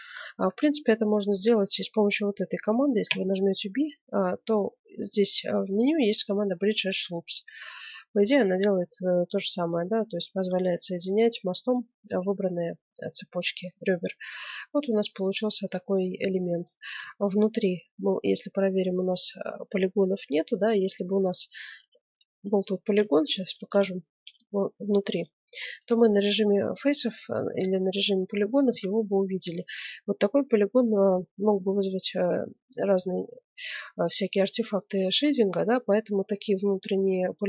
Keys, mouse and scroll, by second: 3.0 w, 8.0-9.1 middle drag, 9.2 middle click, 11.0-12.8 middle drag, 13.6-16.3 middle drag, 17.0 z, 18.3-20.9 middle drag, 21.7 ctrl+Tab, 22.4-24.8 right drag, 24.2 f, 24.8 middle click, 25.4 ctrl+Tab, 26.7 middle click, 27.4 middle click, 28.5-30.2 middle drag, 28.6 a, 30.7 middle click, 36.1 right click, 36.8-37.4 middle drag.